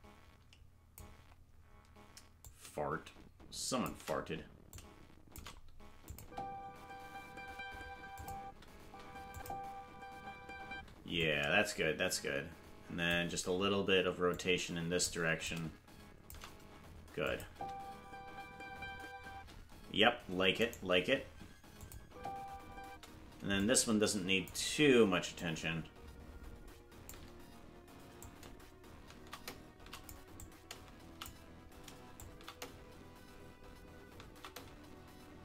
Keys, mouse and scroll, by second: 2.4-3.8 drag, 4.6 click, 6.0-7.4 drag, 6.2 space, 8.1 click, 8.4 space, 9.3 click, 9.3 space, 10.7 space, 11.1-13.1 drag, 14.3 click, 15.4 click, 17.2 click, 17.4 space, 20.6-21.7 right drag, 20.6 space, 21.7 click, 22.0 space, 23.5 click, 23.5 space, 25.3-27.1 shift+drag, 28.1-30.1 drag, 30.3 click, 32.2-35.4 shift+drag.